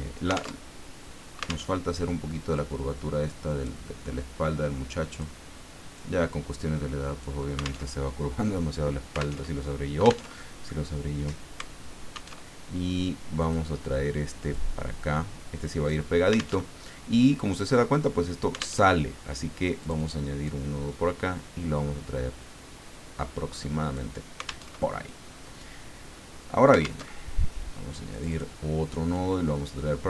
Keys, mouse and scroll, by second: 0.6 alt+Tab, 1.7 alt+Tab, 2.5-3.8 drag, 5.1 click, 5.9-7.2 drag, 7.8 alt+Tab, 9.4 alt+Tab, 10.3 alt+Tab, 12.3 alt+Tab, 13.4 click, 14.5-16.1 drag, 16.6 alt+Tab, 18.8 alt+Tab, 19.8 click, 20.4-24.2 drag, 24.6 alt+Tab, 27.0 alt+Tab, 28.1 click, 29.1-30.0 drag.